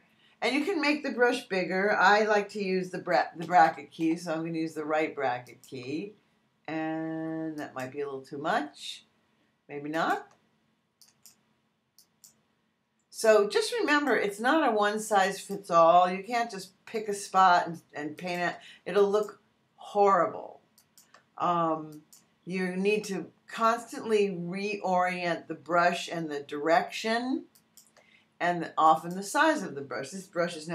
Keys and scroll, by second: 3.4 ], 4.8 alt+].